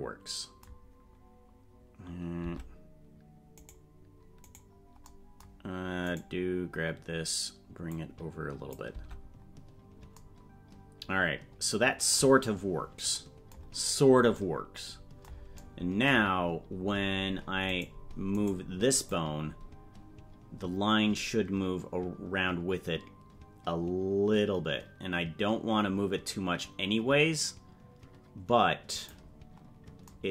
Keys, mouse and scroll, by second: 2.4 Tab, 3.6-5.0 right drag, 6.1 right click, 7.9 click, 9.5 Tab, 13.7 scroll down 1, 14.3 scroll down 7, 17.1 scroll up 3, 17.8 right click, 19.0-29.1 drag.